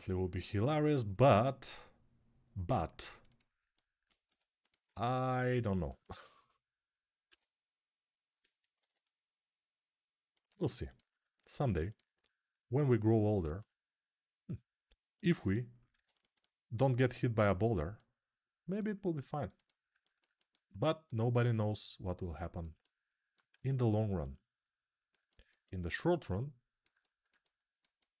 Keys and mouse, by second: 0.9 ctrl+r, 4.0 2, 4.4 click, 4.4 middle click, 5.0 shift+click, 5.1-14.9 alt+shift+middle drag, 10.7 click, 11.4 ctrl+r, 14.9 click, 15.0-17.7 ctrl+middle drag, 15.7 ctrl+r, 17.7-19.2 drag, 19.2 middle click, 19.3 click, 19.4-27.6 alt+middle drag, 20.9-28.2 drag, 23.3 a.